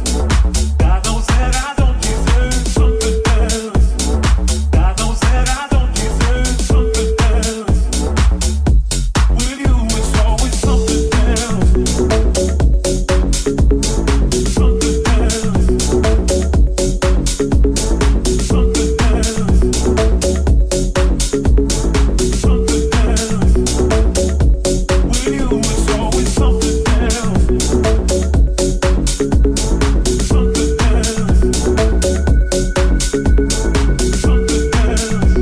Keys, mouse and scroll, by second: 0.9 middle click, 1.1 middle click, 1.8-4.0 right drag, 4.0-8.5 drag, 8.6-9.7 drag, 9.9-13.0 shift+drag, 10.7-13.0 middle drag, 10.7 right click, 15.4-17.6 shift+middle drag, 17.6 click, 18.6-20.9 ctrl+shift+drag, 19.2 middle click, 19.2 right click, 19.6 shift+middle click, 19.6 shift+right click, 21.7-22.7 ctrl+drag, 22.8 shift+click, 25.8 ctrl+l, 25.8 shift+click, 26.4 click, 27.0-29.0 ctrl+drag, 27.9 right click, 29.3 shift+click, 30.1 shift+click, 30.5 click, 30.9 shift+click, 33.0-35.4 drag.